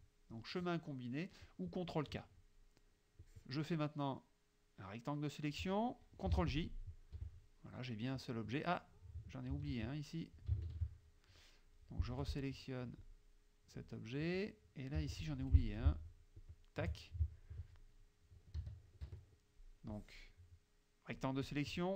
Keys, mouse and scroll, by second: 0.4-1.9 drag, 3.3-5.8 drag, 6.4 shift+j, 6.7 shift+click, 7.2 shift+F1, 9.6 ctrl+z, 10.7 ctrl+shift+z, 12.1 F2, 13.1 click, 13.9 click, 15.0 z, 15.2 click, 15.4 F2, 16.4 shift+click, 18.6 KP_3, 19.1 KP_Subtract, 20.0-21.4 drag.